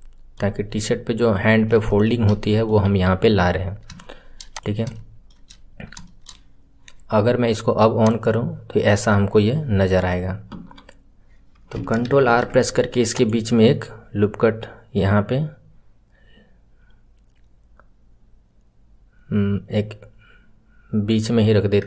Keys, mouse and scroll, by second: 0.5-1.8 scroll down 5, 1.8-2.8 shift+middle drag, 2.8 KP_1, 3.2 scroll up 3, 3.9 shift+middle click, 4.5 click, 4.9 shift+middle click, 5.6-5.9 scroll up 1, 5.9-7.9 shift+middle drag, 7.9 click, 9.1-10.5 middle drag, 10.5 KP_1, 12.1 ctrl+r.